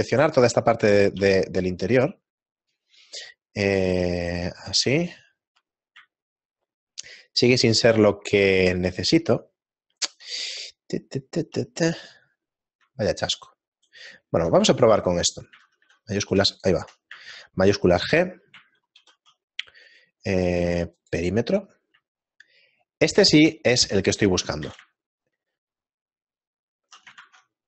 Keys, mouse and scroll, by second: 1.1 b, 5.0 shift+middle click, 7.4 shift+middle click, 11.2 shift+middle click, 17.1 alt+right click, 17.1 shift+f, 19.4 middle click, 19.4 shift+g, 23.3 shift+middle click, 26.4 shift+middle click, 26.4 z.